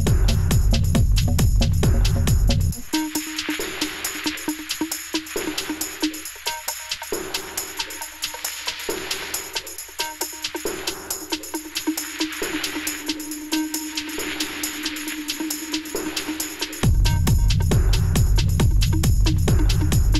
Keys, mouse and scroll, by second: 1.8 ctrl+z, 2.5 Return, 2.9 g, 11.8 ctrl+u, 14.2 Return, 16.0 ctrl+shift+a.